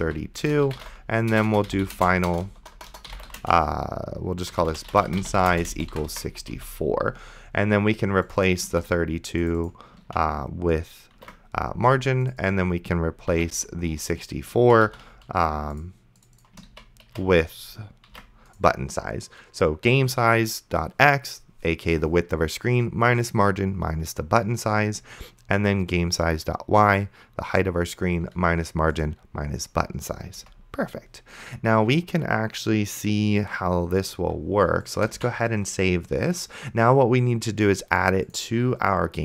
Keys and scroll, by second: 0.0-7.1 typing, 9.0 ctrl+c, 10.4 ctrl+d, 11.8 ctrl+v, 13.6 ctrl+c, 14.9 ctrl+d, 17.0 ctrl+d, 18.4 ctrl+v, 30.6 Return, 35.4 ctrl+s.